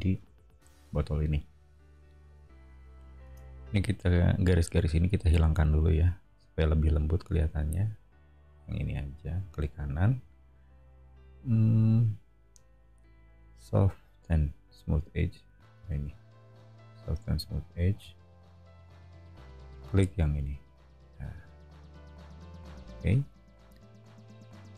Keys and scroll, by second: 3.2 space.